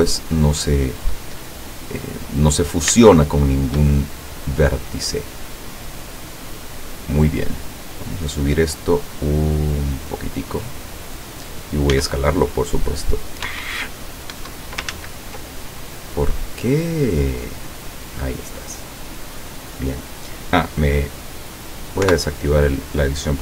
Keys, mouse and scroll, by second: 0.6-1.2 scroll up 1, 2.2 middle click, 2.9 scroll up 1, 3.0 shift+middle click, 3.3 shift+middle click, 4.1 shift+middle click, 5.6-6.7 drag, 7.1-8.4 drag, 9.0-11.4 drag, 12.0 s, 13.5 Escape, 14.4 Escape, 15.0 ctrl+z, 17.3-19.6 drag, 22.1 o.